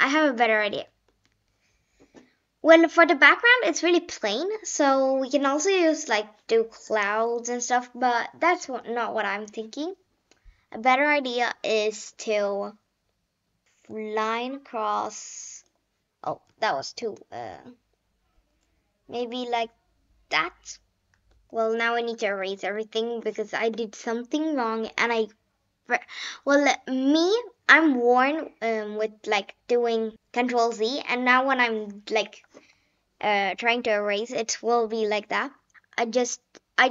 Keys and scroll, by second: 8.5 ctrl+z, 9.0 ctrl+z, 16.5 ctrl+z, 21.5 ctrl+z.